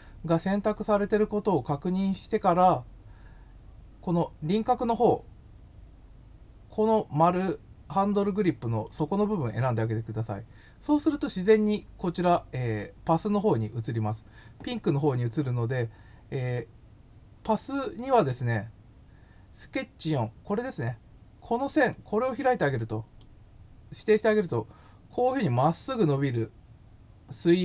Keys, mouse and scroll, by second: 8.8 click, 22.8 click.